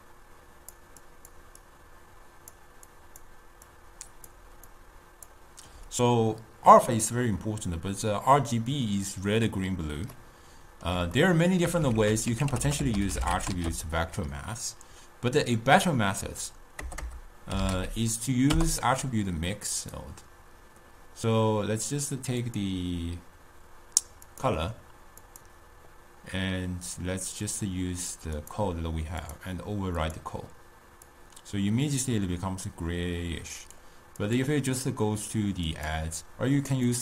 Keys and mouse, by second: 0.1-1.2 drag, 1.2-6.0 typing, 1.4 click, 2.1 click, 3.1 click, 4.0 click, 5.0 click, 10.3-12.1 middle drag, 12.1 ctrl+a, 12.7 t, 17.2 BackSpace, 22.6-28.4 drag, 29.3-37.0 drag.